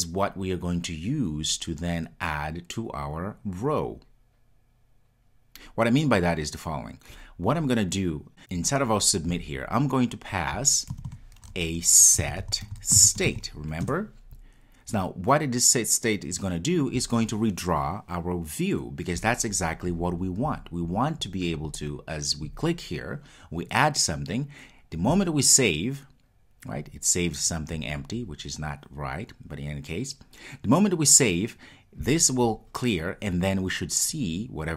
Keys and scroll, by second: 13.9 Return.